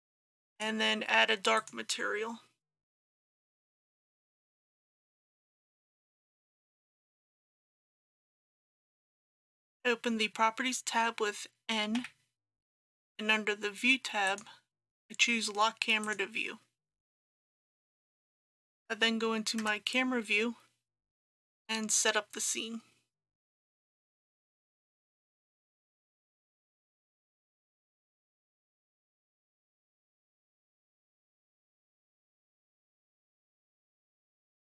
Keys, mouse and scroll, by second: 9.0 middle click, 12.0 n, 14.3 click, 17.4 n, 18.2 click, 19.7 KP_0, 21.8 scroll down 1, 28.7 click, 29.2 shift+a, 30.6 click, 32.7 KP_1, 32.8 KP_2, 33.3 click, 33.8 KP_2, 34.0 KP_0, 34.4 click.